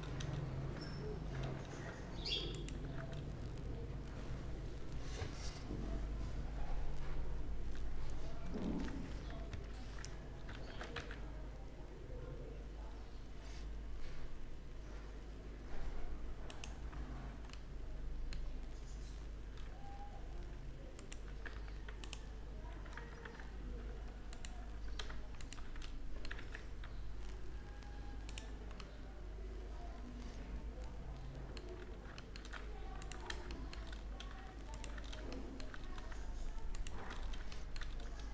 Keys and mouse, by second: 0.1 ctrl+z, 9.5 ctrl+KP_Add, 11.8 shift+d, 17.7-20.1 middle drag, 20.9 click, 21.4 x, 22.9 ctrl+z, 24.2-25.3 drag, 26.3 w, 31.6-32.3 middle drag, 32.9-33.9 drag, 33.9 middle click, 36.4 middle click, 37.0 middle click.